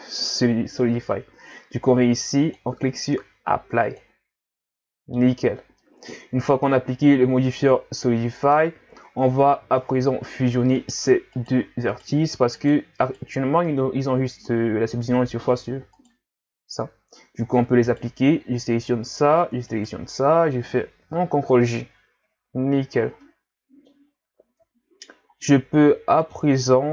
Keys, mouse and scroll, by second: 2.4-5.5 drag, 5.8-6.2 middle drag, 6.2 scroll up 2, 6.5 Tab, 7.0-9.1 middle drag, 9.1 Tab, 9.6 scroll down 2, 9.8 middle click, 10.7 right click, 11.3 right click, 11.9 right click, 12.6 right click, 13.1 right click, 16.0 right click, 17.4 scroll up 1, 17.9 right click, 19.7 shift+right click, 21.2 ctrl+j, 22.8-23.2 scroll down 2, 23.2-24.1 middle drag, 24.1 scroll up 3, 24.5 Tab, 25.4-26.7 middle drag, 26.7 scroll up 2.